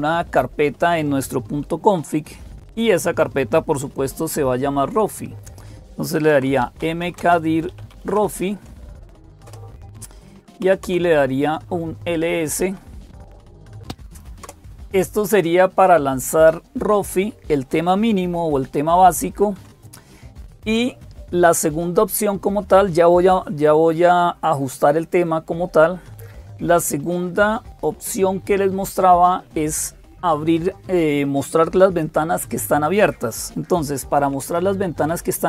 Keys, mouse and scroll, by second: 0.0-35.4 typing, 13.8 super+2, 13.8 Return, 13.8 Up, 14.3 Down, 19.4 Escape.